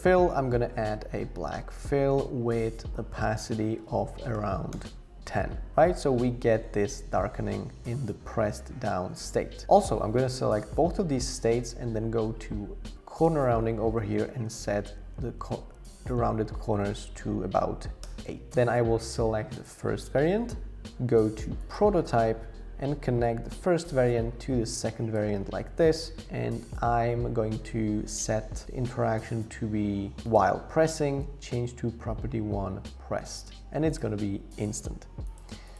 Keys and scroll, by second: 1.7 Return, 3.8-4.8 typing, 14.0 Up, 14.1 Up, 14.3 Up, 14.5 Up, 14.6 Up, 18.0 Return.